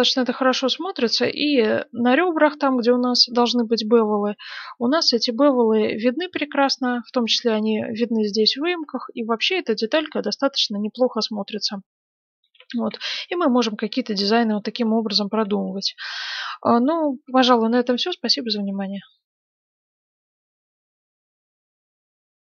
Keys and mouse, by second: 8.9-15.8 middle drag, 12.5 shift+z, 16.0-17.3 middle drag.